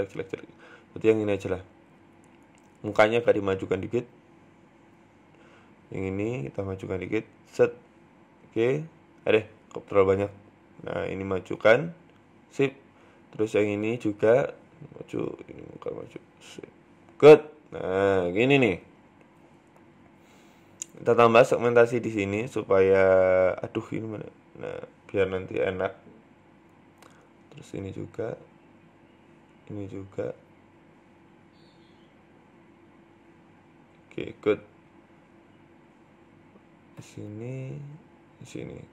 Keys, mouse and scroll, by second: 0.1 ctrl+z, 0.4 middle click, 0.6 Tab, 0.8 scroll down 5, 0.9 middle click, 1.4-2.6 scroll up 5, 1.8 Tab, 2.8 middle click, 3.7 scroll down 3, 3.9 middle click, 4.0 Tab, 4.2 middle click, 4.5-5.3 scroll up 4, 4.7 middle click, 5.3 Tab, 5.4 middle click, 5.9 right click, 6.3 shift+right click, 6.7 KP_3, 7.4 g, 10.5 right click, 11.1 g, 11.9 Tab, 11.9 middle click, 12.3-12.7 scroll down 4, 12.5 middle click, 13.0 Tab, 13.1-13.6 scroll up 4, 13.6 right click, 13.8 shift+right click, 14.2 g, 15.1 right click, 15.6 g, 16.5 Tab, 16.6-17.1 scroll down 4, 16.8 middle click, 18.0-18.5 scroll down 2, 18.1-18.5 scroll up 2, 18.7 Tab, 18.7-19.1 scroll up 4, 19.0 shift+middle click, 19.4 scroll down 2, 19.5 middle click, 19.9-20.3 scroll up 1, 21.2 ctrl+r, 24.8 ctrl+r, 25.9 shift+middle click, 26.9 ctrl+r, 28.2 scroll down 3, 28.4 shift+middle click, 28.6 scroll up 3, 29.2 ctrl+r, 29.8-30.3 scroll down 2, 30.0 shift+middle click, 30.3-30.6 scroll up 1, 31.0 ctrl+r, 32.5 ctrl+r, 34.0 shift+middle click, 34.3-35.3 scroll up 3, 34.3 middle click, 35.3 middle click, 36.0 ctrl+r, 36.7-37.3 scroll down 2, 37.0 shift+middle click, 37.6 ctrl+t, 37.9 ctrl+r, 38.4 Tab, 38.6-38.9 scroll down 3, 38.7 middle click.